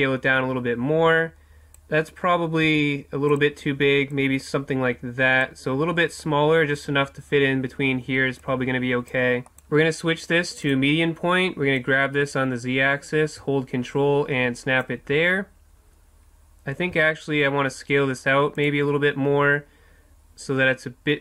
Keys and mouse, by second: 2.7 s, 3.4-6.1 drag, 8.4-9.5 drag, 9.9-11.4 drag, 11.8-13.6 drag, 16.9 s, 18.7-21.2 drag.